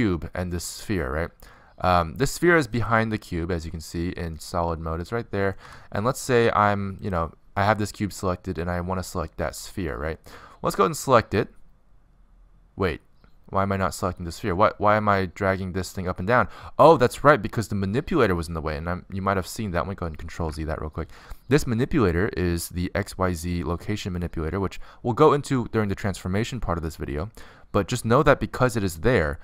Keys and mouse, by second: 1.5-2.7 middle drag, 3.5-5.2 drag, 5.3 middle click, 5.7 z, 6.2 middle click, 6.3 middle click, 6.4 z, 7.7 middle click, 9.5-11.5 middle drag, 12.0-14.4 middle drag, 21.2 ctrl+z, 24.7-25.5 middle drag.